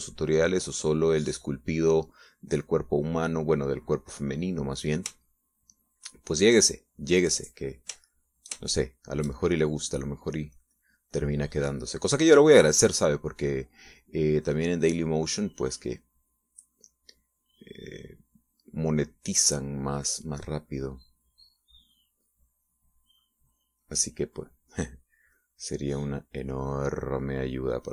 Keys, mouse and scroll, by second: 4.1-5.8 drag, 6.2 shift+middle click, 7.2 shift+middle click, 9.2 shift+middle click, 11.6-25.1 drag, 26.4-27.9 drag.